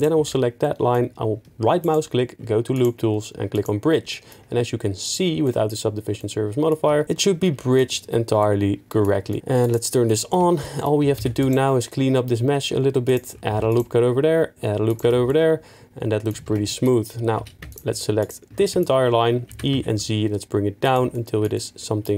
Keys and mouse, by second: 1.8-3.6 right drag, 5.0 click, 6.2 middle click, 6.8 Tab, 7.8 Tab, 8.4 middle drag, 9.3 middle click, 9.4 Tab, 9.6 click, 10.0 middle drag, 10.4 Tab, 10.6 middle click, 11.2 ctrl+r, 11.4 click, 13.0 click, 13.5 ctrl+r, 13.7 click, 14.9 click, 15.0 Tab, 16.4 Tab, 17.4 2, 18.2 alt+click, 19.5 e, 19.7 z, 20.8 click, 21.1 shift+middle click.